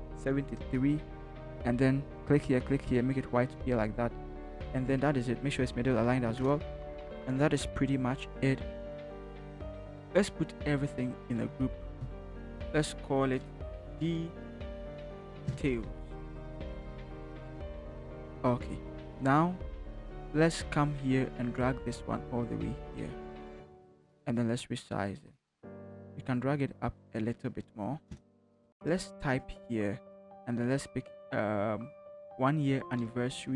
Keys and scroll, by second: 0.0-0.6 typing, 5.2 ctrl+t, 6.3 Return, 12.2 ctrl+shift+g, 13.3-17.1 typing, 17.5 ctrl+-, 28.1 Return, 28.6 t, 33.0 ctrl+c.